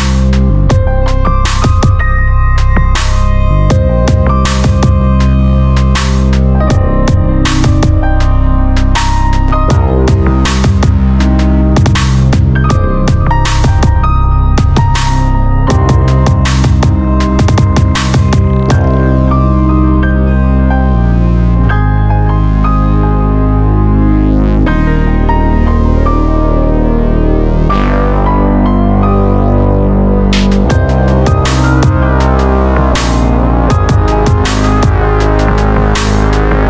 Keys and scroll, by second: 5.5 Escape, 9.6 ctrl+f, 16.3 alt+z, 17.6 ctrl+z, 23.1 ctrl++, 24.3 ctrl++, 36.2 ctrl+b.